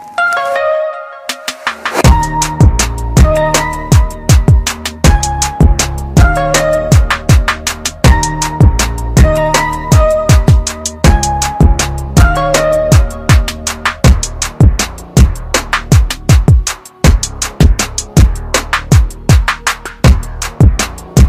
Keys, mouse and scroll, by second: 0.0-2.8 typing, 0.4 click, 1.1 click, 1.6 click, 2.6 click, 3.3 click, 3.9 click, 4.1 r, 4.6 click, 4.9 ctrl+r, 7.1 click, 8.6 scroll down 1, 9.6 click.